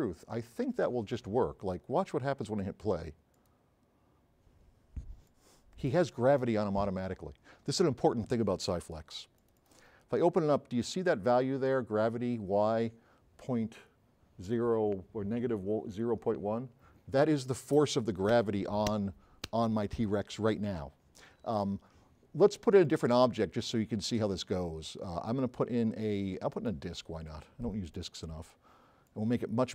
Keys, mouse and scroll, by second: 5.3 click, 22.9 click.